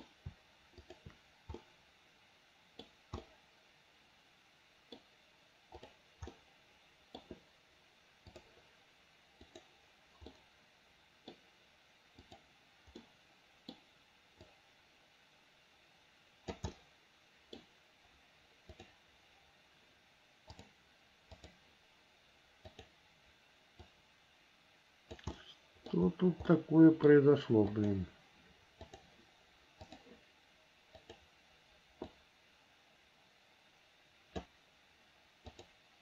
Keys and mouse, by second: 1.8-3.1 middle drag, 3.4-5.2 middle drag, 6.0 click, 6.5 middle click, 9.7 click, 10.5 middle click, 11.3 click, 11.3 right click, 12.4 click, 13.3 click, 13.3 right click, 13.4 middle click, 14.6-16.7 drag, 16.9 middle click, 17.1 click, 17.1 right click, 17.3 middle click, 17.6 click, 17.6 right click, 17.7 middle click, 18.9 click, 20.7 click, 22.8 click, 24.1-25.3 drag, 25.5 middle click, 26.7 middle click, 27.9 click, 29.0 click, 30.0 click, 32.3-34.6 drag, 35.7 click.